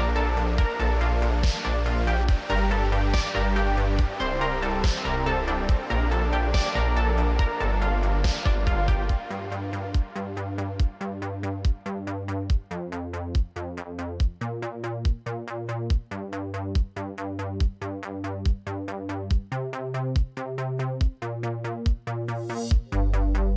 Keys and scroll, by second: 1.1 ctrl+alt+Tab, 1.3 alt+g, 1.4 alt+r, 11.1 alt+h, 16.7 r, 16.8 z, 19.0 r, 19.2 z.